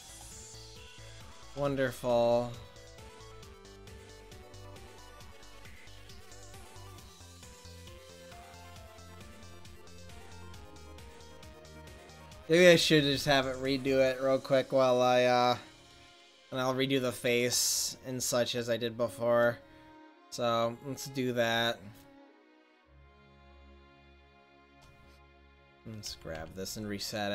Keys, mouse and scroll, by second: 0.6-5.6 middle drag, 6.1 ctrl+z, 7.9-9.0 middle drag, 9.2-10.5 middle drag, 20.8-23.5 drag, 24.5-26.1 drag, 25.5 right click, 26.1 a, 26.4 click, 26.4 a.